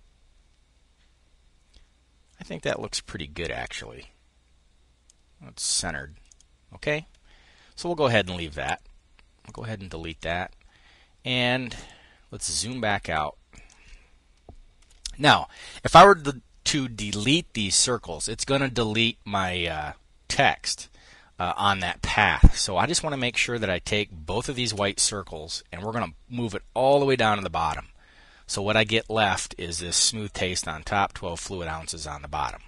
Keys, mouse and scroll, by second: 2.3-5.3 drag, 5.8 click, 7.6 click, 9.0 click, 9.7 click, 11.2-13.1 drag, 14.3 5, 22.7 click, 23.9 shift+click, 25.3 click, 26.4 click.